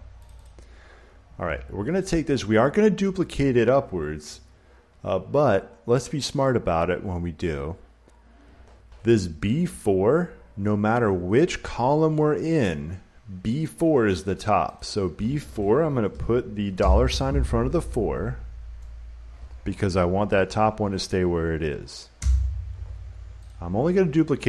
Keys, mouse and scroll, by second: 0.2 click, 0.4 click, 14.7 click, 16.7 $, 22.1 Return, 23.4 click.